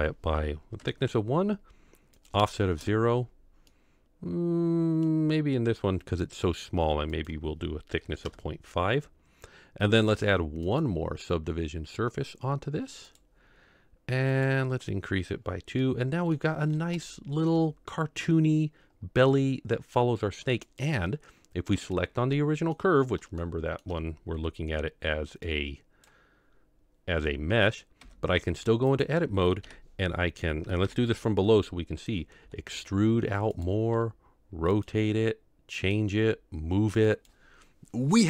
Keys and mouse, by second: 2.3 click, 3.7-5.1 middle drag, 7.1-8.3 drag, 10.7-13.2 drag, 14.3 click, 15.9-16.3 middle drag, 17.1-17.5 shift+middle drag, 19.3-20.1 middle drag, 20.7 click, 22.3-22.9 middle drag, 23.4-23.9 shift+middle drag, 25.7 click, 28.0 Tab, 28.9 click, 29.6 KP_7, 30.9 ctrl+KP_7, 32.5 e, 33.9 r, 34.8 g, 36.2 g.